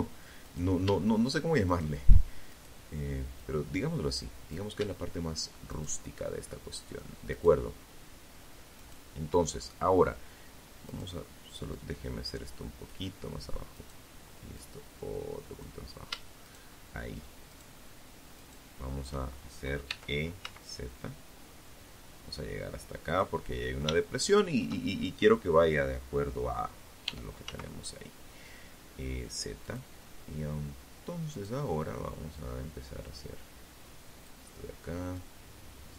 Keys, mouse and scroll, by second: 0.7 shift+right click, 1.5-2.9 drag, 3.9 shift+right click, 5.5 shift+right click, 6.9 shift+right click, 9.0 right click, 9.9-11.3 drag, 11.9 right click, 12.7-13.9 drag, 14.6 shift+right click, 15.7 shift+right click, 16.5 shift+right click, 18.0 e, 18.6 z, 21.3 click, 22.1 shift+middle click, 25.2 e, 25.6 z, 27.8 click, 29.5 right click, 30.5-32.6 drag, 33.3-34.7 drag, 35.1 click.